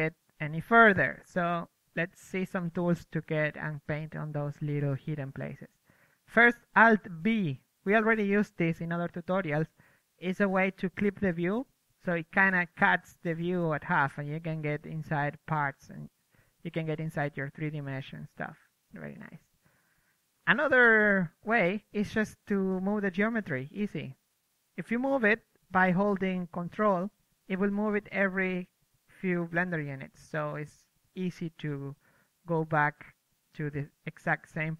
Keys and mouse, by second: 5.0 KP_3, 5.3 alt+b, 6.5 z, 6.6 z, 7.2 alt+z, 7.5 alt+b, 9.1-10.7 drag, 11.2-12.2 middle drag, 11.3-13.4 drag, 13.4-17.5 middle drag, 17.5 click, 17.6 middle click, 18.0 alt+b, 18.3 KP_3, 18.6 alt+b, 19.6 Tab, 19.8-20.7 typing, 20.1 ctrl+Tab, 22.2-24.0 right drag, 22.4 z, 22.6 g, 24.0 g, 25.5 Tab, 25.7 alt+b, 25.7 click, 26.7 KP_4, 27.1 KP_3, 27.6 Tab, 28.1 Tab, 28.9-32.7 typing, 29.1 Tab, 29.6 Tab, 30.9 click, 31.4 Tab, 32.0 ctrl+Tab, 33.0 Tab, 33.5-34.7 drag, 33.8 middle click.